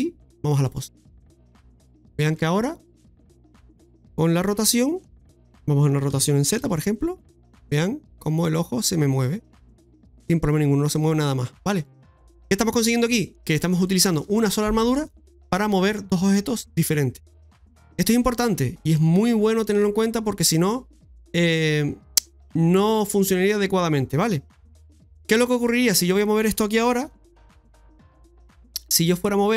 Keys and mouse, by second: 0.6 middle click, 2.0 right click, 2.3 shift+middle click, 2.8 middle click, 3.8-4.9 middle drag, 12.9 middle click, 13.8 shift+middle click, 18.2 middle click, 24.0 middle click, 25.2 right click, 25.7 middle click.